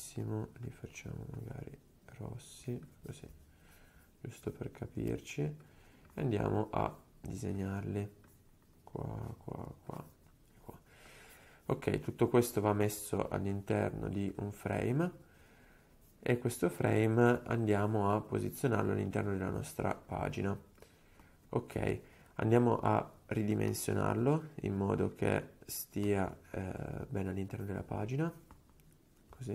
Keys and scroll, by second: 5.2 super+z.